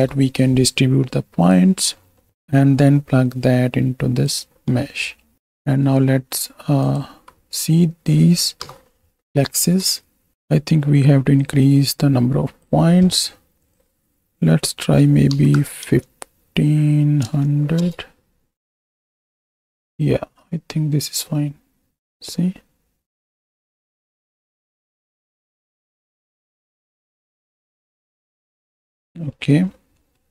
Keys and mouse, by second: 2.0 middle click, 2.6-4.5 drag, 5.3 middle click, 5.6 middle drag, 6.8 alt+shift+click, 8.6 KP_7, 9.6 shift+click, 11.3-12.6 drag, 13.6-17.8 drag, 20.4 click, 20.6 click, 26.5-27.6 middle drag, 27.9 KP_4, 28.8 click, 29.4 click, 30.0 click.